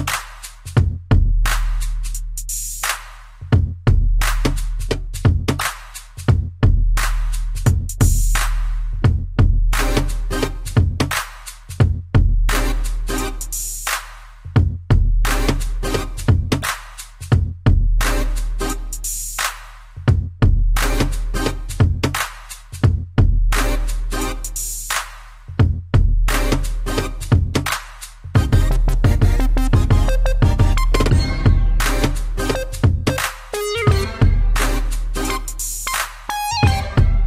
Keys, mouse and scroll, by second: 0.2 shift+click, 0.5 shift+click, 1.1 shift+click, 1.5 shift+click, 2.2 middle click, 3.4 click, 4.5 shift+middle click, 4.9 scroll up 1, 5.8 1, 6.7 shift+middle click, 7.2 middle click, 8.0 scroll up 1, 8.4 shift+middle click, 9.2 g, 10.2 x, 12.2 y, 15.8 click, 16.0 click, 16.3 scroll down 1, 16.4 middle click, 18.1 click, 19.2 middle click, 19.8 scroll up 1, 20.1 middle click, 22.2 1, 23.4 3, 24.1 scroll up 1, 24.3 middle click, 25.7 scroll down 1, 26.0 shift+middle click, 26.2 middle click, 26.3 scroll up 2, 27.9 click, 31.3 click, 31.8 middle click, 33.3 middle click, 34.7 scroll down 1, 35.2 middle click, 36.3 middle click.